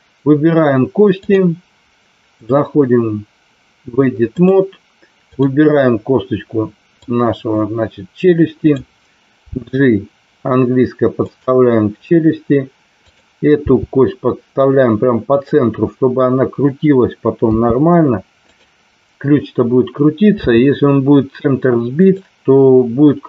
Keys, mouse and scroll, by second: 1.0 click, 2.5-4.4 drag, 5.3 click, 7.0-8.7 drag, 9.5 g, 11.2 click, 13.5 g, 15.3 click, 17.5 s, 18.4 click, 20.3 g, 21.9 click.